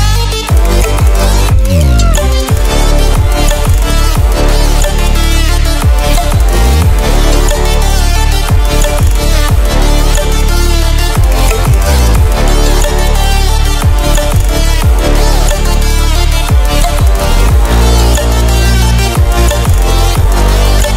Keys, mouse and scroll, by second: 13.1 ctrl+w, 15.3 ctrl+w, 16.8 click.